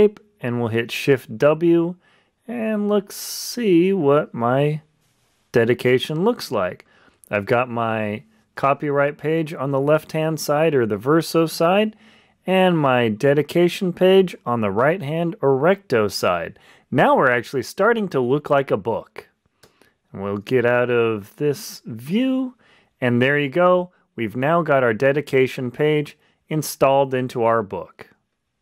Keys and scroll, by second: 21.2 Escape.